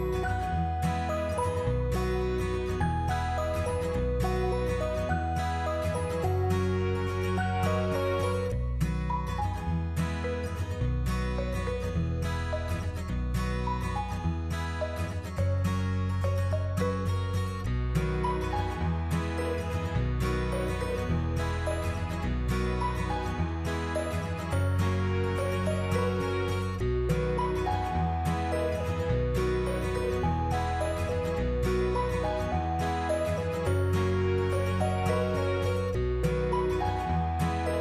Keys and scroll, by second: 7.6 Delete, 19.8 1, 20.1 Return, 22.2 8, 22.4 Tab, 22.7 8, 23.0 Return, 33.6 1, 34.4 Return.